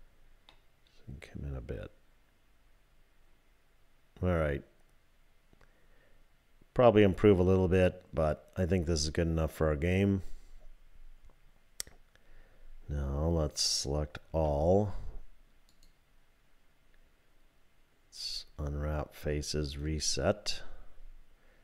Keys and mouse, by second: 0.5-9.6 drag, 14.3 a, 15.7-19.8 drag.